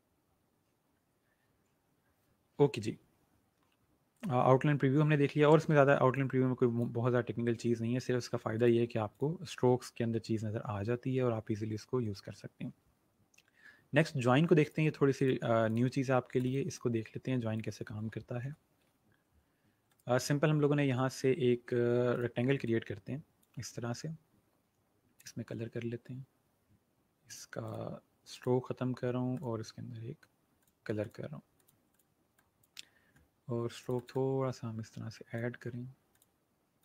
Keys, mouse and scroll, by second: 4.1 click, 14.6 click, 19.8 right click, 22.0 click, 27.2 click.